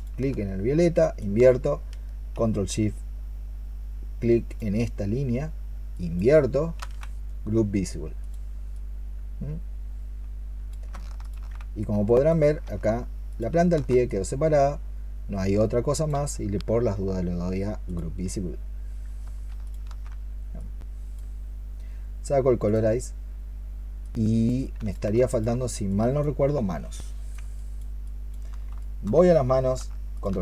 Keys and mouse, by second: 0.9 ctrl+shift+click, 4.3 ctrl+shift+click, 5.8 ctrl+shift+click, 11.1 ctrl+shift+click, 13.1 ctrl+shift+click, 19.5 ctrl+shift+click, 25.0 alt+click, 27.4 alt+click, 28.5 alt+click, 28.6 alt+click, 30.0 ctrl+shift+click.